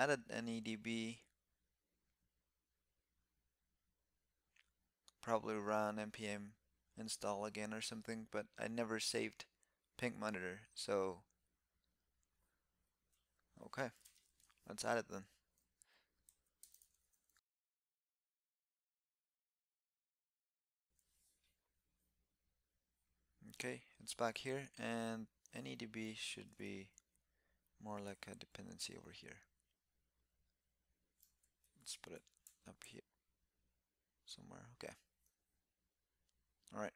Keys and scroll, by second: 26.6 alt+Up, 27.9 alt+Up, 32.5 alt+Up, 34.8 super+s.